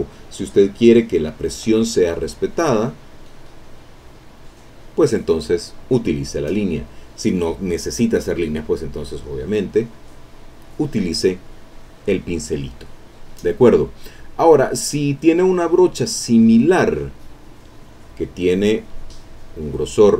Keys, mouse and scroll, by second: 0.9 click, 2.4-4.6 drag, 7.0 click, 8.1 middle click, 8.9-10.1 drag, 15.0 click, 15.8 middle click, 18.0 click, 18.8 click.